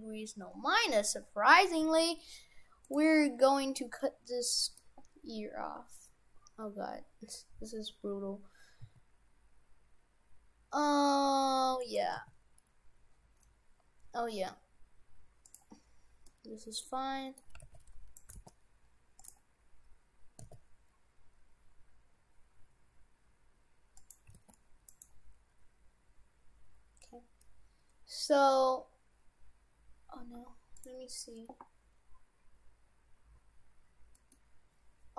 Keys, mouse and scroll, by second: 0.5-0.8 scroll up 5, 1.1-1.4 scroll down 4, 1.8 g, 3.5 scroll up 2, 4.0 middle click, 6.2-6.6 scroll up 2, 7.0 scroll up 2, 8.1 scroll up 1, 8.8 s, 11.1 w, 12.2 g, 15.8-16.3 scroll up 4, 16.3 middle click, 17.6 g, 18.3 g, 19.6 scroll down 1, 20.2 scroll down 1, 20.4 s, 24.3 g, 26.6 scroll down 1, 34.2 middle click.